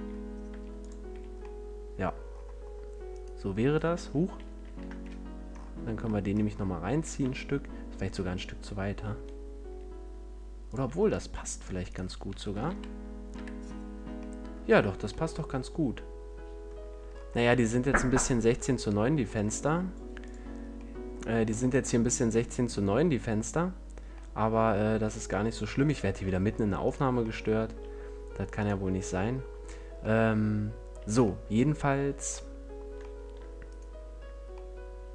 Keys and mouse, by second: 0.8-2.5 drag, 1.0 a, 2.5 middle click, 3.0-4.1 drag, 4.1 ctrl+z, 4.5 ctrl+z, 5.6 middle click, 6.1 middle click, 6.8 e, 10.8 a, 11.8 middle click, 12.6 KP_Decimal, 13.2 KP_5, 15.2 middle click, 16.2 middle click, 16.2 middle click, 16.8 a, 20.5-22.3 drag, 22.3-24.4 middle drag.